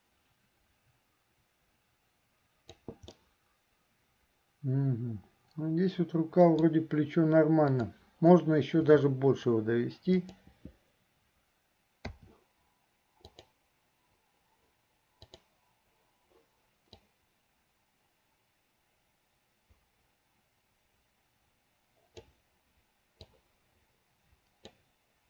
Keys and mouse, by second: 3.3-6.9 middle drag, 7.7 click, 9.0 r, 12.2 typing, 13.5 click, 15.4 click, 17.2-22.5 drag, 23.3-24.8 drag.